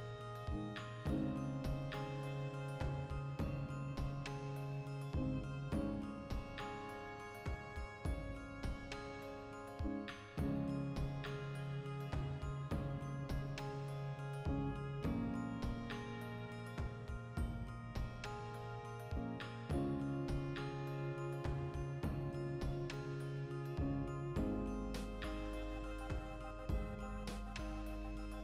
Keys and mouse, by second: 0.3 m, 2.4 click, 3.2 Tab, 3.5 shift+middle click, 3.9 3, 4.2 alt+right click, 4.4 ctrl+middle click, 5.3 alt+shift+right click, 6.0 middle click, 6.5 alt+shift+right click, 7.1 shift+middle click, 7.5 alt+shift+right click, 7.7 middle click, 8.2 alt+shift+right click, 8.6 ctrl+z, 8.8 alt+shift+right click, 9.4 middle click, 10.1 alt+shift+right click, 10.5 ctrl+KP_Add, 10.7 ctrl+KP_Subtract, 11.4-12.9 shift+middle drag, 12.9 click, 13.1 alt+e, 14.7 click, 14.9 ctrl+z, 15.1 ., 15.8 alt+e, 17.5 shift+click, 18.6 click, 18.7-22.6 middle drag, 18.8 Tab, 21.6 Tab, 22.4 2, 22.6-23.8 alt+right drag, 23.8 Tab, 24.2 alt+q, 24.5-27.4 ctrl+middle drag, 25.1 r, 25.7 Return, 26.1 g, 27.4 click, 27.6 Tab, 27.8 a.